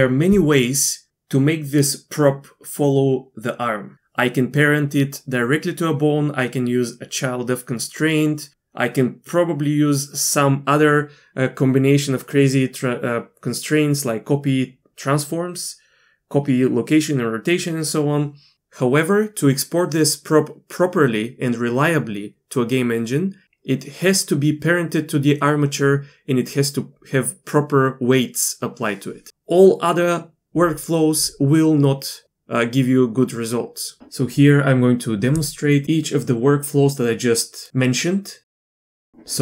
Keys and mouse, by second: 38.4 shift+middle click.